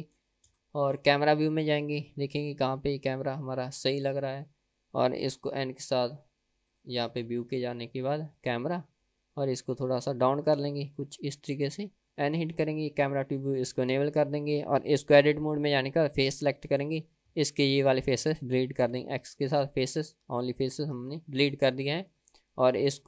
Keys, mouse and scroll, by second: 0.1 middle click, 0.8 KP_0, 2.0-3.2 scroll down 1, 3.5 click, 5.7 n, 6.9 click, 7.4 click, 8.5 click, 9.0 n, 9.5-9.8 scroll down 2, 10.9 scroll down 1, 11.3-12.0 scroll up 1, 12.0 scroll down 1, 12.3 n, 13.2 click, 13.8 n, 14.3 click, 15.2 Tab, 16.4 3, 16.8 click, 17.6 shift+click, 18.0 shift+click, 19.0 x, 21.0 Tab, 21.7 click, 22.3-23.0 middle drag.